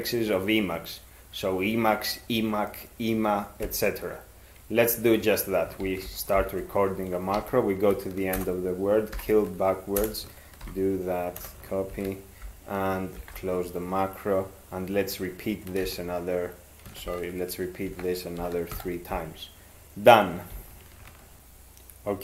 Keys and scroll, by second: 5.8 ctrl+x, 6.4 (, 7.3 ctrl+e, 8.3 ctrl+BackSpace, 9.1 ctrl+y, 10.0 Return, 10.6 ctrl+y, 11.4 BackSpace, 11.9 ctrl+x, 13.2 ), 15.9 ctrl+x, 17.1 ctrl+g, 17.9 ctrl+3, 18.4 ctrl+x, 18.7 e.